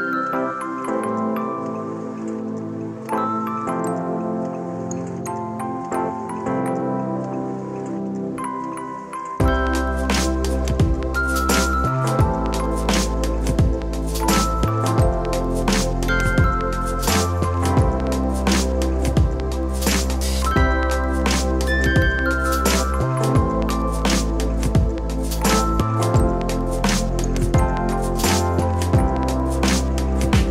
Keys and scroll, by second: 2.9 Tab, 3.7 ctrl+r, 7.2 x, 8.9 x, 10.5 ctrl+r, 12.2 ctrl+r, 15.1 g, 20.7 s, 24.9 g, 29.6 Tab.